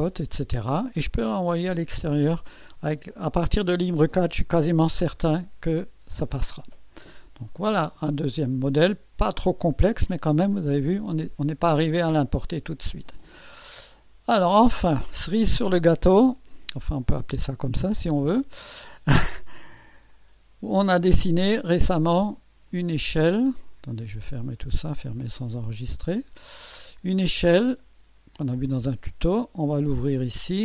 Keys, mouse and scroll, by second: 10.8 click, 13.8 click, 17.0 click, 18.3 click, 20.1 click, 21.3 click, 22.0 click, 22.7 click, 23.6 click, 24.9 click, 26.1 click, 29.1-30.6 drag.